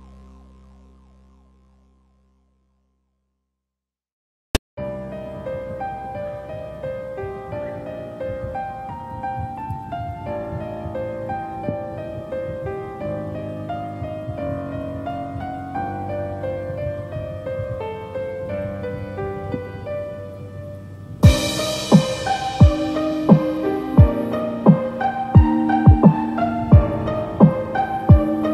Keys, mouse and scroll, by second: 9.7 click, 10.8 s, 14.2 2, 16.8 Tab, 17.0-18.0 scroll down 5, 18.0 alt+z, 18.3-18.7 scroll down 2, 18.5 shift+middle click, 18.8-19.1 scroll up 5, 19.2 shift+middle click, 24.5 scroll down 1, 25.0 shift+middle click, 25.4 scroll up 2, 25.6 shift+middle click, 26.3 scroll down 1, 26.5 middle click, 28.2 scroll down 1.